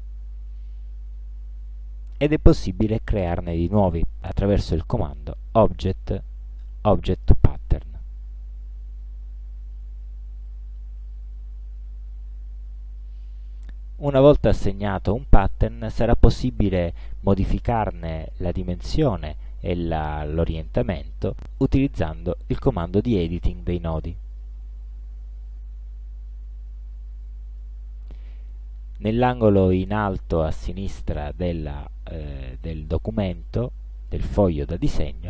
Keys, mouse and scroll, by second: 0.0 click, 4.8 click, 11.1 click, 13.1 click, 24.4 click, 26.6 ctrl+scroll up 1, 27.2 ctrl+click.